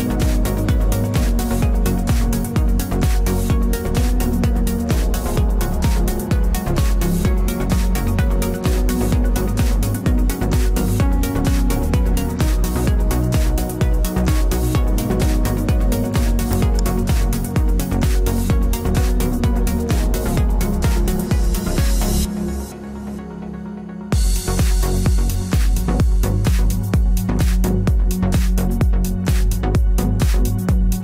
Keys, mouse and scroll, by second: 0.5 ctrl+r, 3.8-5.7 drag, 4.5 ctrl+s, 8.3 c, 9.1 right click, 10.6-12.4 drag, 12.7 ctrl+z, 14.3-16.1 drag, 17.7-18.8 middle drag, 18.8 ctrl+r, 19.4 middle click, 23.4-25.3 right drag, 24.0 KP_Decimal, 27.1 ctrl+z, 27.5 ctrl+z, 27.9 ctrl+z, 30.3 e.